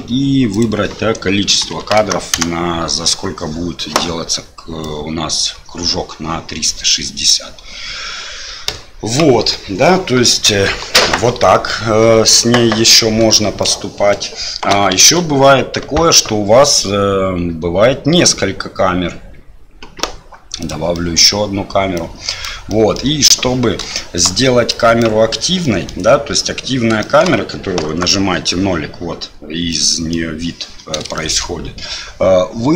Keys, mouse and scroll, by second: 0.6-2.9 drag, 4.8-9.2 drag, 9.6-10.0 middle drag, 13.7-14.2 middle drag, 15.0 shift+a, 20.9-21.2 middle drag, 22.0 click, 22.8 middle drag, 24.0 shift+middle drag, 24.7 click, 25.6-25.9 middle drag, 27.1 shift+middle click, 27.8 KP_0, 29.7-30.2 middle drag, 31.1-31.5 shift+middle drag.